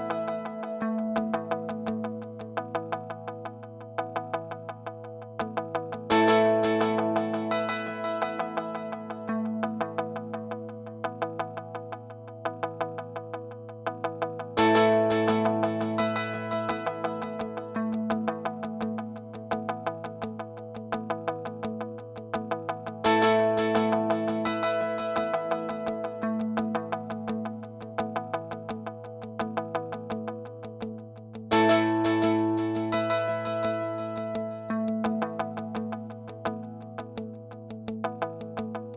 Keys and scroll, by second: 2.3 Escape, 3.6-5.6 typing, 7.1 super+z, 8.5-9.4 typing, 21.8-24.9 typing, 25.2 Return, 29.6 Return.